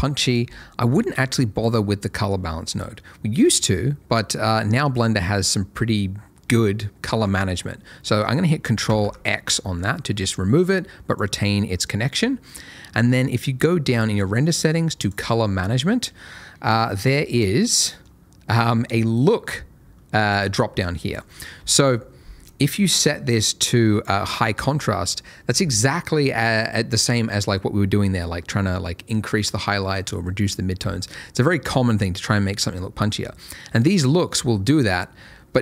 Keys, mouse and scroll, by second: 1.3 middle click, 8.9 ctrl+x, 9.5 middle click, 10.6 click, 11.9 middle click, 15.0 click, 15.3 middle click, 16.6 click, 17.7 middle click, 19.2 click, 21.5 F11, 22.4 click, 33.3-34.6 ctrl+scroll down 1, 34.6-35.5 ctrl+scroll up 1.